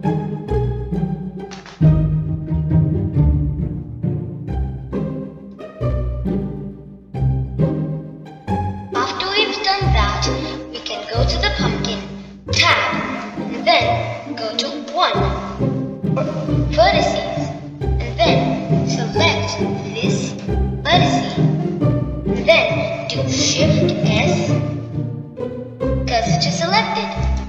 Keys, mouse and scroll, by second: 4.5-7.5 middle drag, 13.1 click, 14.4 b, 15.1-16.9 middle drag, 18.6-21.3 scroll up 2, 23.2-25.9 middle drag, 25.9 shift+s.